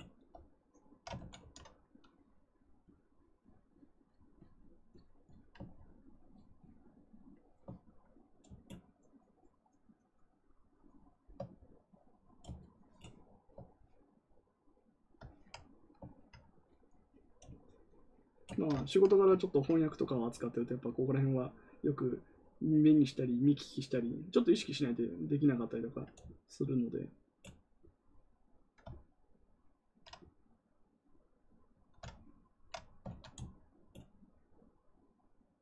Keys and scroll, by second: 1.1 ctrl+z, 1.3 ctrl+z.